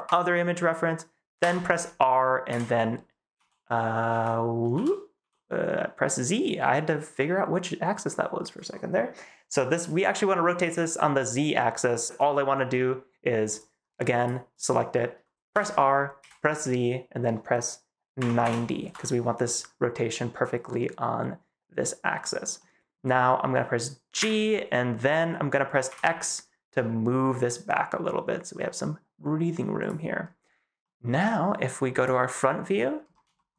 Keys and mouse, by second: 1.3 r, 2.4-5.1 typing, 15.4 r, 16.1 z, 18.1 9, 18.3 0, 18.7 Return, 22.5-22.8 middle drag, 24.1 g, 25.8 x, 29.7 click, 30.7 middle click, 30.8 click, 31.9 click, 33.3 shift+middle click.